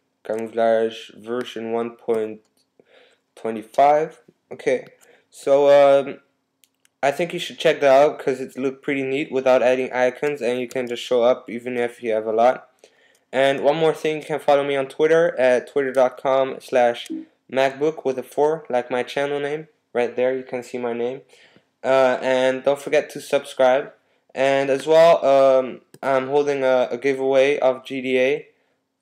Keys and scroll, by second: 10.7 super+s, 16.4 typing, 16.8 Tab.